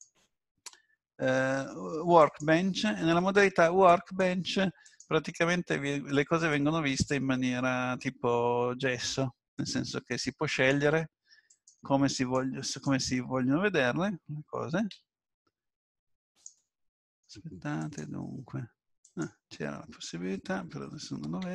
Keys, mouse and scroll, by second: 5.2 click, 6.5 Tab, 7.3 middle click, 10.5 click, 12.1 click, 14.9 n, 16.3 click, 17.8 click, 21.4 Tab.